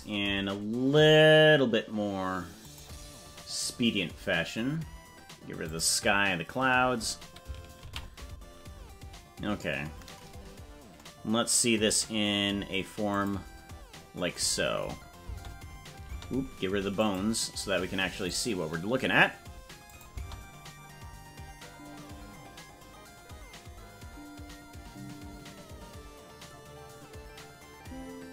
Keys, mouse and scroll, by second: 3.2 click, 3.2 scroll up 8, 4.3 scroll up 1, 6.2 click, 10.5 ctrl+s, 13.2 click, 15.2 space, 17.0-18.4 drag, 20.0 click, 20.1 space.